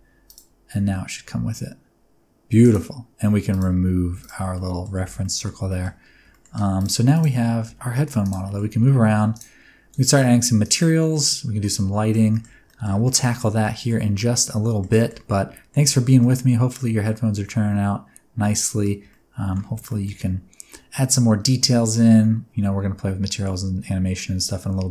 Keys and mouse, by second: 0.7 r, 0.8 r, 2.6 click, 4.1 x, 4.5 middle drag, 5.0 alt+a, 5.2 middle drag, 5.7 shift+middle drag, 6.3 shift+middle drag, 6.8 click, 7.7 g, 8.4 middle click, 8.8 r, 9.3 click, 9.8 r, 10.6 click, 11.2 middle click, 12.3 shift+middle click, 12.6 ctrl+middle drag, 13.0 shift+middle click, 13.2 click, 13.2 right click, 13.3-13.9 middle drag, 13.9 click, 13.9 right click, 14.1-14.8 middle drag, 14.9 shift+middle click, 15.3-15.7 ctrl+middle drag, 15.9 shift+middle click, 16.2-18.8 middle drag, 19.1 ctrl+middle click, 19.9 shift+middle drag, 20.1-24.9 middle drag.